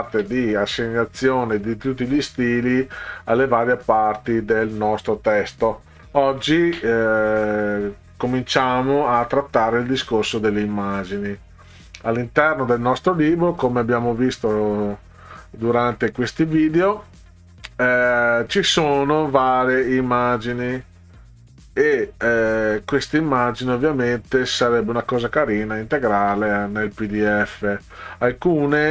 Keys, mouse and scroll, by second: 11.7 click, 13.1 scroll down 2, 14.4-14.9 scroll down 4, 15.7 scroll down 2, 20.0 click, 21.8 scroll down 2, 22.4 scroll down 2, 24.0 scroll down 2, 25.4 click, 28.2 scroll down 2.